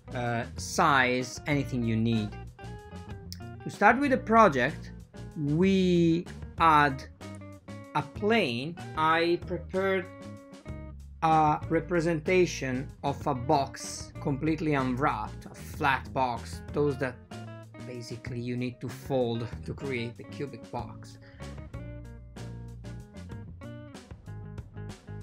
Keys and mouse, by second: 0.0 n, 2.3 shift+a, 4.5 ctrl+middle click, 6.2 ctrl+middle click, 7.8 click, 8.6 ctrl+middle click, 9.5-10.0 drag, 11.0-12.1 drag, 13.0-14.5 drag, 13.9 n, 14.9 n, 15.5 click, 15.9-16.9 drag, 17.6 click, 17.9 click, 18.5 click, 18.9 click, 19.5 click, 19.8 ctrl+t, 20.1 g.